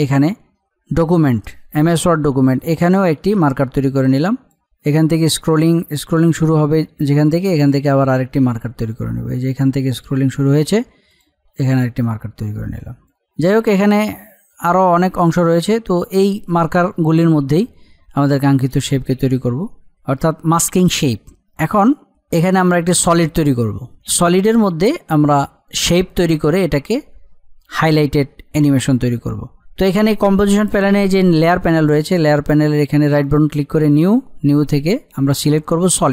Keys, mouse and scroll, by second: 2.7-17.6 drag, 21.6-22.8 drag, 33.1 right click, 35.9 click.